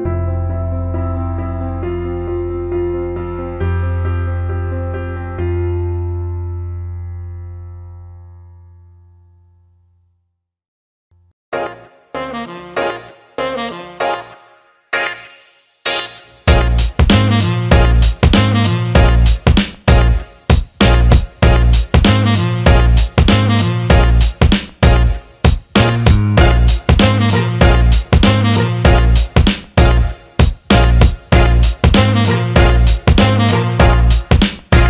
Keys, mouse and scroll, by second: 1.5 click, 11.0 alt+shift+middle click, 11.7 Tab, 13.0 click, 14.1 alt+shift+middle click, 14.5 alt+middle click, 15.7 alt+middle click, 22.9 l, 28.1 click, 29.4 alt+middle click, 32.1 click.